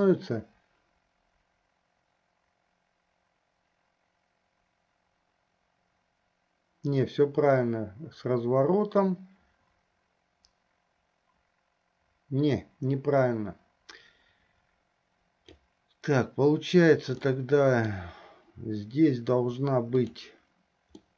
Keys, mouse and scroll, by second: 17.3-18.2 middle drag, 20.0 click.